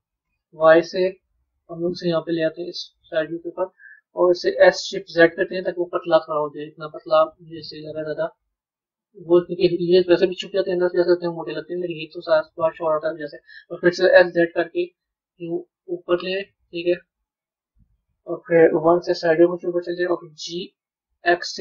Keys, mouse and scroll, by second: 17.5-18.7 middle drag, 18.7 KP_1, 20.2 g.